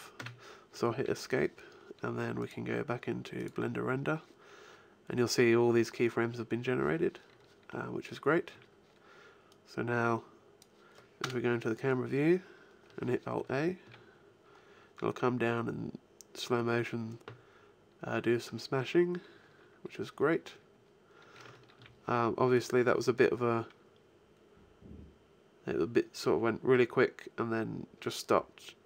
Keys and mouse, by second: 2.2-4.1 drag, 7.5 middle click, 8.4 a, 9.4 click, 11.0 KP_0, 12.0 middle click, 13.6 alt+a, 21.6 alt+a, 22.4 click.